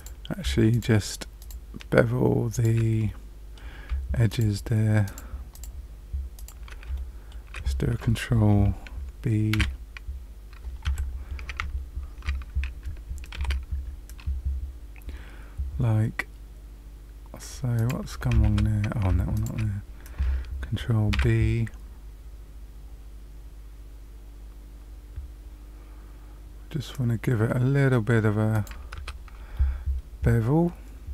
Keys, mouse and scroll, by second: 0.6 shift+click, 1.3 click, 2.5 click, 3.0 middle click, 4.2 shift+click, 5.0 shift+click, 5.5 shift+click, 6.3 shift+click, 6.9 shift+middle click, 9.5 ctrl+g, 13.3 ctrl+b, 18.4 ctrl+z, 19.3 shift+click, 21.1 ctrl+b, 28.9 Tab, 29.5 middle click.